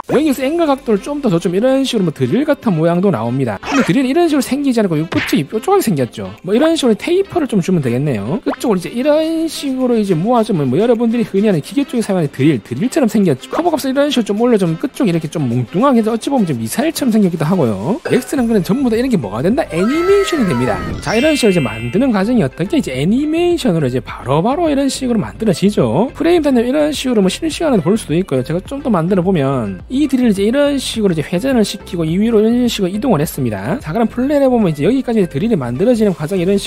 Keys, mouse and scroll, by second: 1.1-2.9 drag, 3.3 alt+middle click, 4.3 middle click, 5.0-5.4 scroll up 2, 6.4 t, 7.5 click, 8.6-10.6 drag, 13.4 z, 14.0-15.3 drag, 15.8 alt+middle click, 21.3 click, 26.1-29.7 drag, 30.2-31.3 drag, 31.8 w, 32.6-33.7 drag.